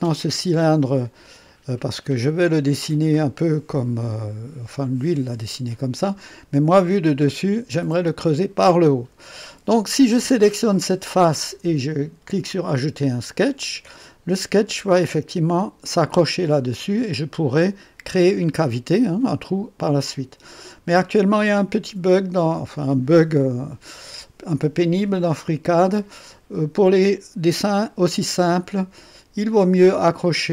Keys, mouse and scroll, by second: 0.8-1.5 drag, 3.4 click, 7.2 click, 10.7 click, 28.7 click, 30.1-30.5 drag.